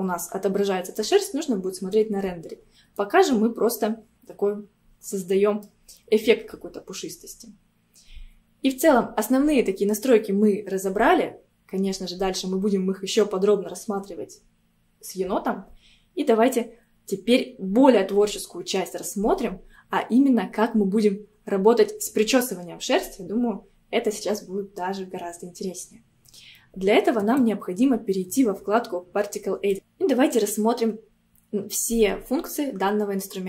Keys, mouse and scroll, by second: 2.7 scroll down 3, 3.0-5.9 middle drag, 5.9 scroll up 2, 27.2-29.7 drag.